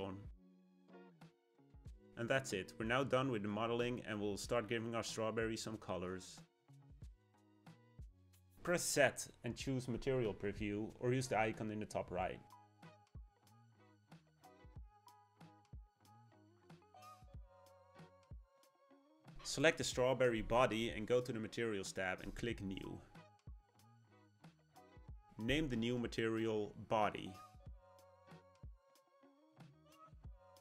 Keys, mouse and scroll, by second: 0.3 middle click, 0.9-1.4 scroll down 3, 1.4-4.4 middle drag, 8.6 z, 11.0-14.0 shift+middle drag, 16.7 click, 18.0 click, 21.1 click, 23.6-29.0 drag.